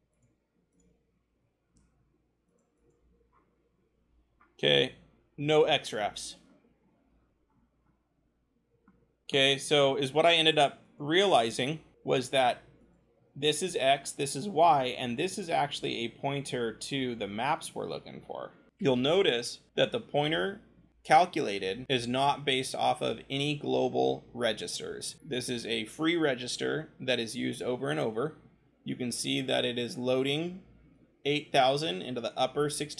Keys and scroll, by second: 0.1 ctrl+shift+c, 1.7 ctrl+v, 3.2-4.4 scroll.